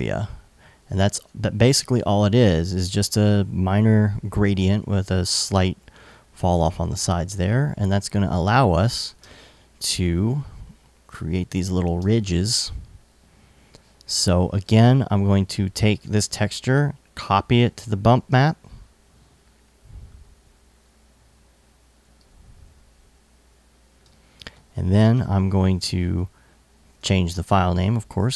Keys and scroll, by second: 8.0 alt+super+s, 8.8 super+Tab, 15.8 super+c, 17.8 super+v, 26.6 super+Tab.